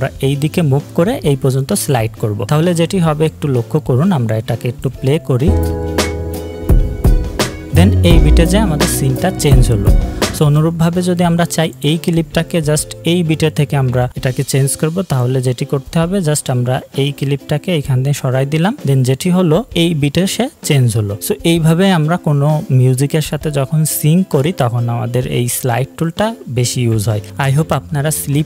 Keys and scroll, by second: 5.5 space, 10.4 space, 19.7 space.